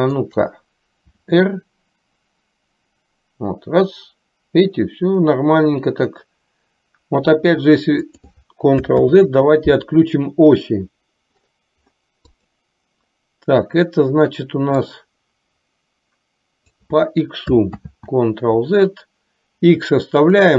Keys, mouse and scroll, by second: 1.3 r, 9.2 ctrl+z, 14.9-17.0 drag, 18.0 ctrl+z, 20.4 click.